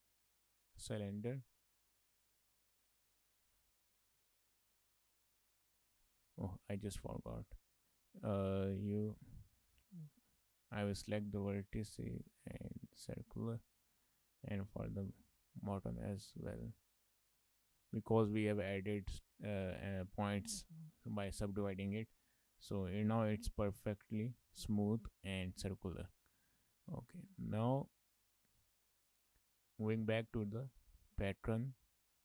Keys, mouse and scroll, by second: 1.7 middle click, 2.5 right click, 4.3 middle click, 6.0 Tab, 6.6 Tab, 7.2 middle click, 8.9 alt+click, 10.1 alt+click, 11.0 right click, 13.6 shift+middle click, 14.0 middle click, 15.3 alt+click, 15.9 right click, 17.7 Tab, 18.4 shift+middle click, 18.6 middle click, 19.6 shift+middle click, 20.0 middle click, 21.4 shift+middle click, 21.7 middle click, 22.3 scroll up 3, 22.5 shift+middle click, 22.7 middle click, 23.4 middle click, 24.8 middle click, 26.1 shift+middle click, 26.4-26.8 scroll down 2, 26.8 middle click, 27.0 middle click, 27.9 middle click, 30.2 click, 30.8 shift+middle click, 31.0 middle click, 31.7 shift+middle click, 32.1-32.2 scroll up 1.